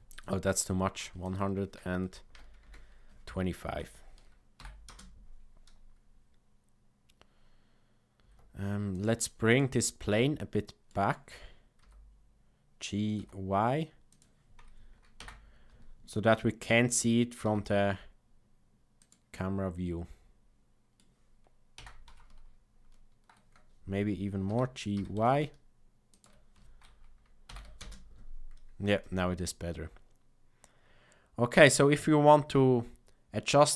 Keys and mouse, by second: 4.6 shift+Left, 4.8 space, 8.3 space, 8.9 click, 9.5 click, 10.0-10.9 middle drag, 11.7 g, 15.1 KP_0, 16.6 g, 19.3-20.9 middle drag, 21.7 KP_0, 24.4 g, 27.4 shift+Left, 27.7 space.